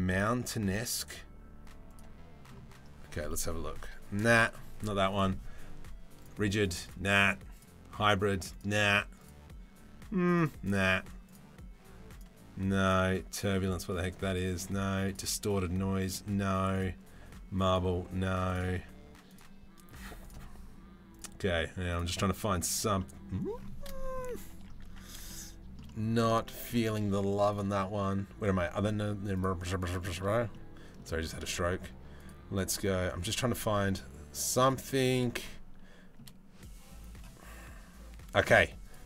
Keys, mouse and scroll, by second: 2.9 middle click, 4.7-5.9 drag, 6.5 click, 8.2 click, 10.1 click, 11.7 click, 14.0 click, 15.7 click, 17.3-18.3 drag, 19.0-20.0 drag, 20.7-21.7 drag, 22.6-22.9 middle drag, 24.9-25.4 shift+middle drag, 25.5 middle click, 26.0 shift+middle drag, 27.3-29.2 drag, 29.5 middle click, 30.1-30.6 shift+middle drag, 31.9-33.7 drag, 34.5 middle drag, 35.0-35.8 shift+middle drag, 38.4-39.0 drag.